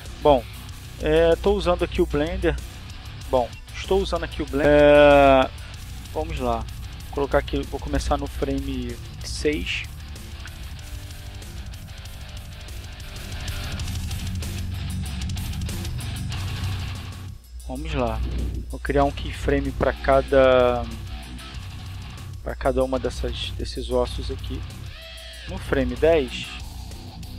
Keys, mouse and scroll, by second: 4.2 middle click, 4.6 click, 9.5 r, 10.1 click, 15.6 middle click, 16.7 middle click, 17.6 r, 18.6 click, 19.3 right click, 19.6 r, 20.3 click, 22.0 click, 24.0 right click, 26.1 r.